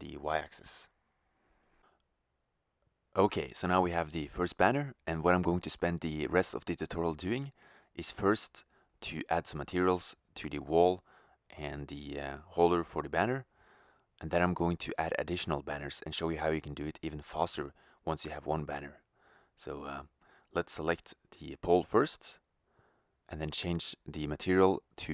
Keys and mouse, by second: 10.2 shift+z, 10.7 Tab, 14.4 shift+z, 18.1 shift+z, 19.7-24.7 drag.